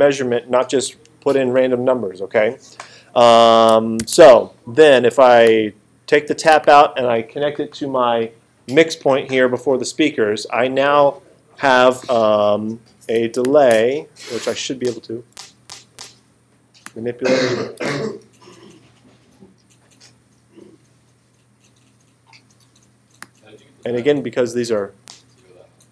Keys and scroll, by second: 4.0 alt+super+8, 14.8 space, 17.8 space, 25.0 space.